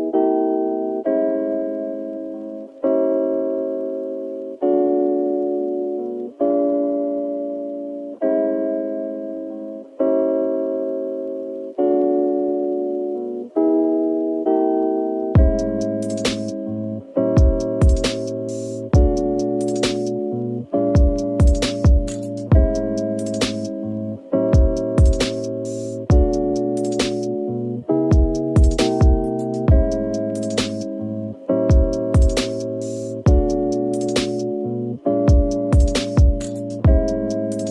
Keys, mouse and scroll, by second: 0.0 2, 1.0 2, 1.0 alt+click, 2.0 alt+shift+click, 2.3 alt+shift+middle click, 2.3 click, 3.4 alt+shift+click, 3.8 alt+shift+click, 4.3 ctrl+z, 4.5 ctrl+z, 4.7 ctrl+z, 4.9 ctrl+z, 5.3 ctrl+z, 6.2-7.3 typing, 10.4 typing, 11.3 alt+click, 12.2 alt+shift+click, 12.8 alt+shift+click, 13.9 alt+shift+click, 14.3 alt+shift+middle click, 14.3 click, 15.2 alt+shift+click, 16.7 ctrl+b, 17.8 Tab, 18.3 middle click, 19.1 Tab, 20.7-23.7 typing, 22.2 right click, 24.1 scroll up 1, 25.8-26.5 typing, 26.6 middle click, 28.1 middle click, 28.5 Tab, 29.7 Tab, 30.7 shift+right click, 31.2 typing, 33.3-33.8 scroll down 1, 33.5-34.9 typing, 36.5 middle click.